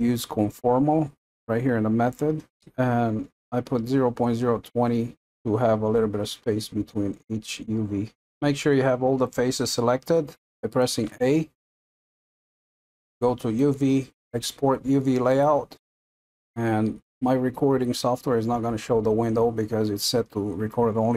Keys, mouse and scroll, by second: 11.0 a.